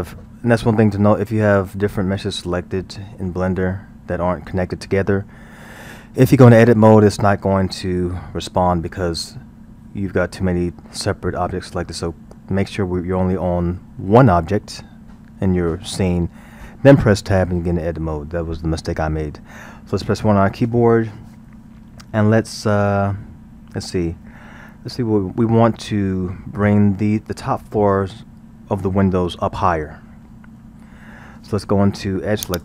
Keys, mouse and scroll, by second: 19.9 KP_1, 24.3-29.3 middle drag, 30.5 KP_1, 32.5 click.